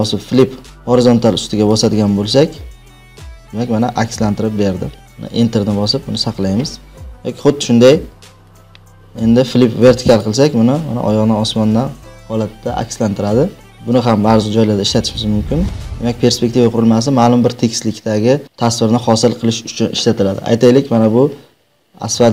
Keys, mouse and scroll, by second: 1.8-2.8 drag, 5.1 Return, 7.7 ctrl+t, 8.5 right click, 10.1 click.